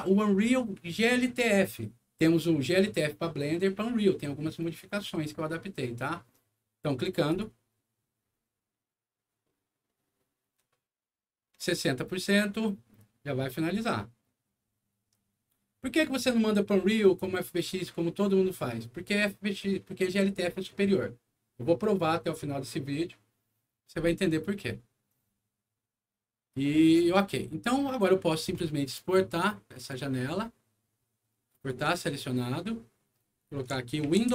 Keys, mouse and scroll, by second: 7.2 click, 26.8 click, 29.7 click, 31.5 click, 33.7-34.3 typing.